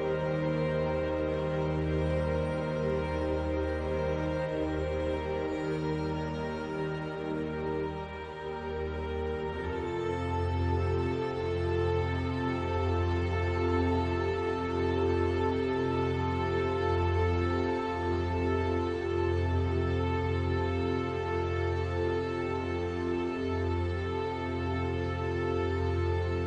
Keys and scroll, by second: 3.2 ctrl+z.